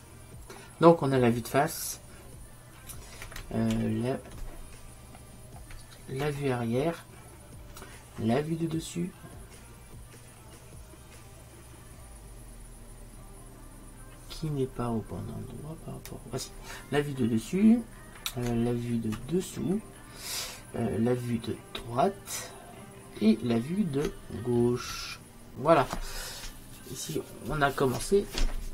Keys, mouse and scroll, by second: 3.8 ctrl+n, 19.2 ctrl+n, 25.0 ctrl+n.